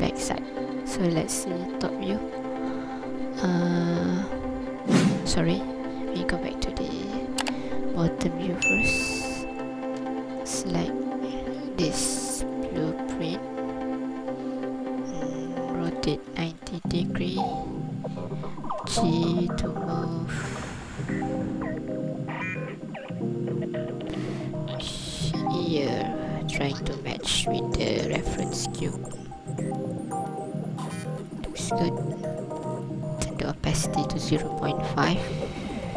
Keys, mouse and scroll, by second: 0.5-0.9 scroll down 1, 1.8 KP_7, 2.4-3.0 scroll up 1, 3.0-4.6 scroll down 1, 4.6-5.2 scroll down 1, 6.1 ctrl+KP_7, 6.8 scroll up 2, 7.3 scroll down 1, 10.0 Tab, 10.4 right click, 12.1 ctrl+click, 15.9 r, 16.3 KP_9, 16.5 KP_0, 16.9 click, 18.8 g, 31.2 click, 32.3 click, 35.4 scroll up 3.